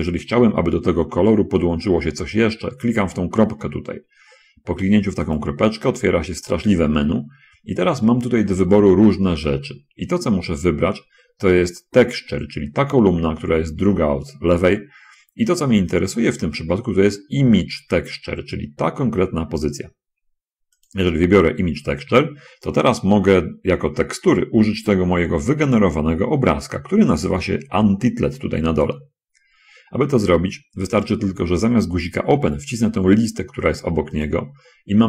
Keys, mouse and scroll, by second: 20.9 click, 34.1 click.